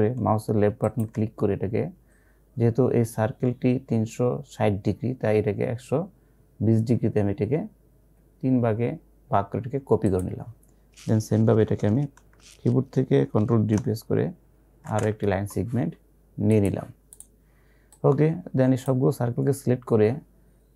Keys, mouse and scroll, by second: 0.9 click, 10.2 click, 14.9 ctrl+d, 16.5-20.7 drag.